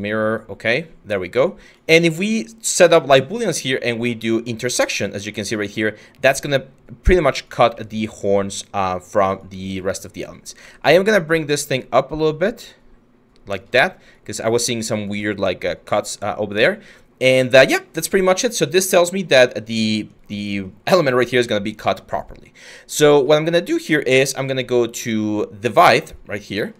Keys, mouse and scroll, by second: 10.2 w.